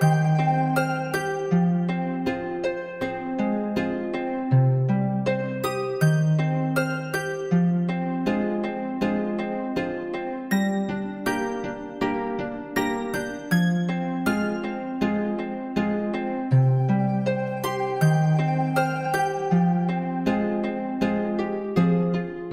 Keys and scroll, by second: 1.5 ctrl+0.